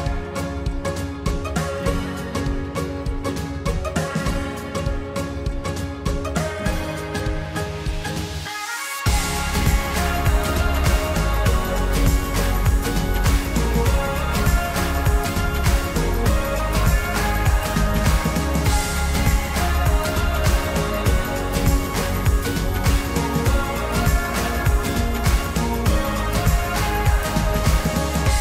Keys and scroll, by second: 5.2 ctrl+t.